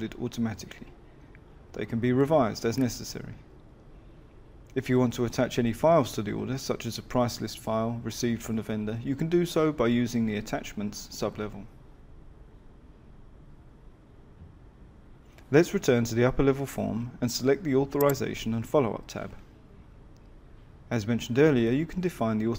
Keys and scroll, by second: 15.5 Escape.